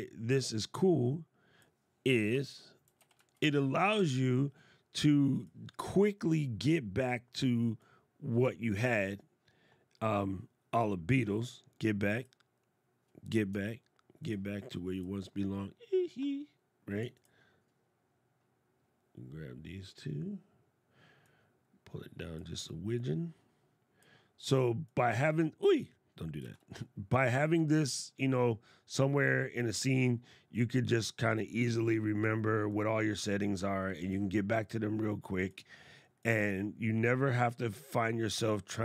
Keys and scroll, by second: 2.1 shift+g, 26.0 super+z.